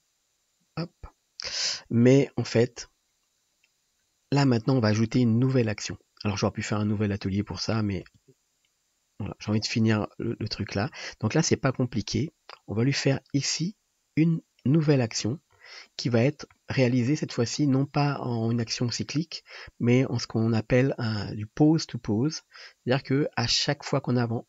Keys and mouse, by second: 4.1-5.5 middle drag, 5.2 [, 8.3 space, 16.4-18.2 shift+middle drag, 22.5 click, 23.5-24.4 drag.